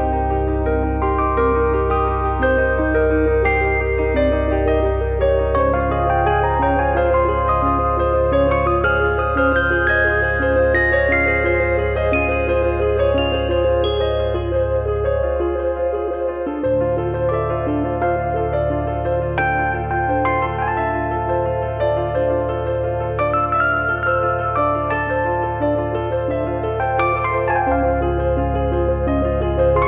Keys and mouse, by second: 0.0 click, 3.0 click, 6.2 click, 7.0 click, 11.2 click, 15.8 click, 22.5 click, 23.7 click, 27.0 click.